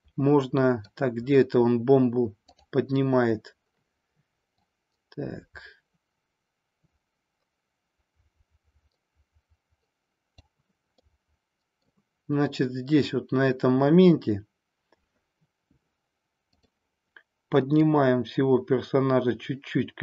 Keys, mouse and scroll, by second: 2.4 click, 4.6-10.3 drag, 11.0-12.0 middle drag, 17.7-20.0 drag.